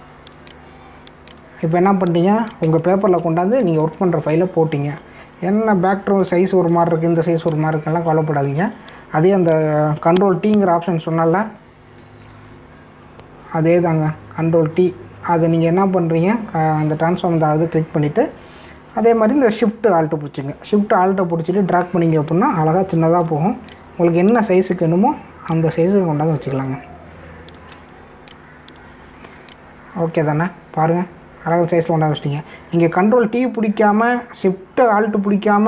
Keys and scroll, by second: 3.9 ctrl+-, 13.0 ctrl+t.